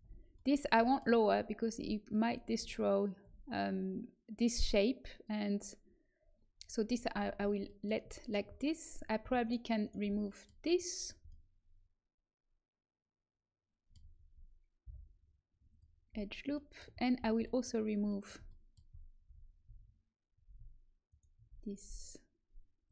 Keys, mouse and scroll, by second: 0.2-1.4 right drag, 1.4-2.9 middle drag, 7.6 middle click, 9.4-11.6 middle drag, 11.8-13.1 middle drag, 14.8 Delete, 16.5 middle click, 19.2 a, 21.0-22.7 right drag.